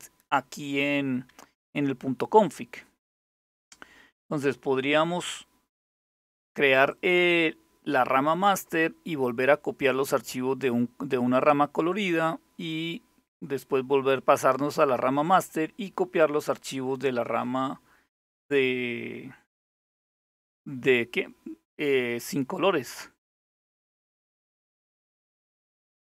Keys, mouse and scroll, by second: 4.6-5.6 drag, 5.8 click, 6.6 click, 23.3 click, 25.4 click.